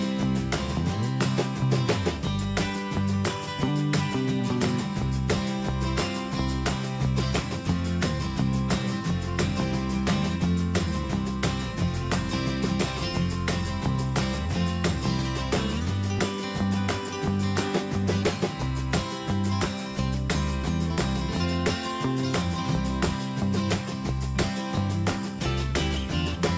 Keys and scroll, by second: 2.2 BackSpace, 24.2 ctrl+a.